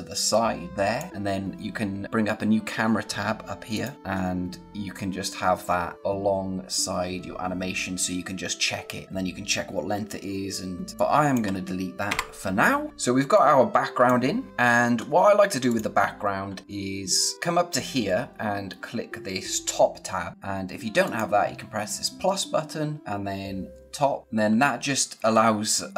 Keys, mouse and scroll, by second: 3.7 click, 3.9 scroll down 1, 4.1 scroll up 1, 4.7-5.1 scroll down 1, 5.1-5.8 scroll up 1, 5.8 scroll down 1, 5.9 scroll up 1, 6.0-6.7 scroll down 1, 6.7-7.1 scroll up 1, 7.1-7.4 scroll down 1, 7.5 scroll up 1, 10.9 click, 12.9 scroll down 1, 13.1 space, 13.3 click, 13.6 space, 14.5-14.8 scroll up 1, 15.6 click, 21.0 click, 24.2 click, 24.5-25.2 scroll down 1, 25.4 scroll up 1.